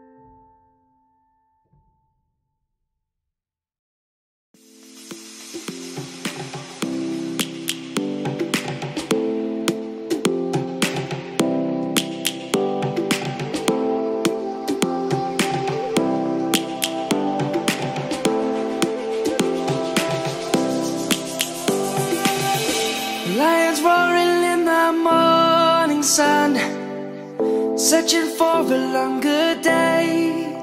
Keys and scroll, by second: 4.4 ctrl+z, 4.7 ctrl+z, 6.1 ctrl+z, 7.1 ctrl+z, 18.2 ctrl+z, 18.6 ctrl+z, 22.4 ctrl+z, 24.2 ctrl+z, 25.2 ctrl+z, 25.9 ctrl+s, 26.2 ctrl+s.